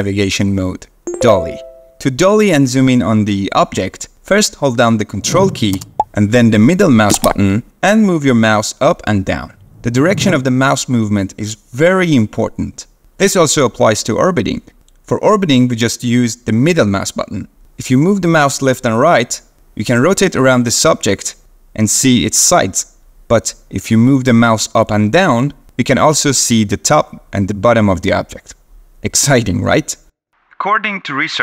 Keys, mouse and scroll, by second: 7.1-10.2 ctrl+middle drag.